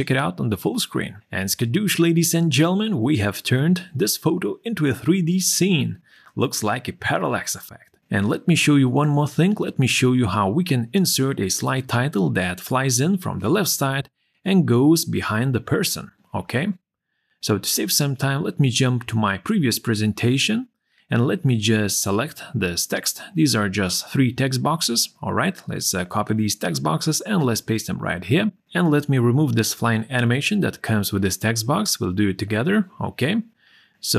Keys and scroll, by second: 25.0 ctrl+c, 27.2 ctrl+v.